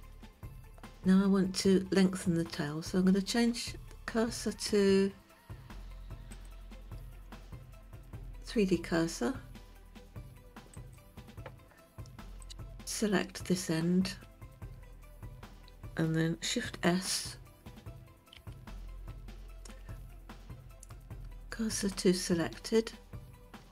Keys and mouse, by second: 6.4-11.0 drag, 12.5 click, 18.5 shift+s.